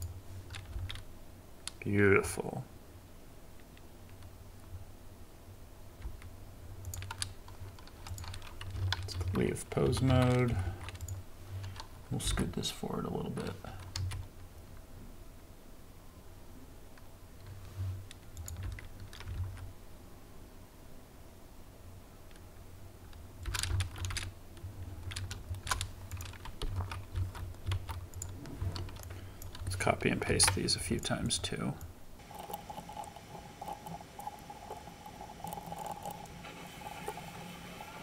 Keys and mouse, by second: 0.7 space, 6.0 space, 10.7 ctrl+Tab, 12.3 g, 14.0 x, 18.6 space, 19.4 shift+Left, 23.4 space, 23.7 shift+Left, 24.0 space, 24.9 space, 25.6 shift+middle click, 26.8 ctrl+Tab, 27.2 ctrl+Tab, 27.8 ctrl+Tab, 28.6 middle click, 28.9 ctrl+z, 30.3 ctrl+c, 32.5 ctrl+v, 33.1 ctrl+z, 33.8 ctrl+shift+z, 34.1 click, 34.6 click, 34.7 Delete, 35.0-35.5 drag, 35.5 ctrl+Tab, 35.7 ctrl+z, 35.9 ctrl+z, 36.1 ctrl+Tab, 36.2 click, 37.2 v.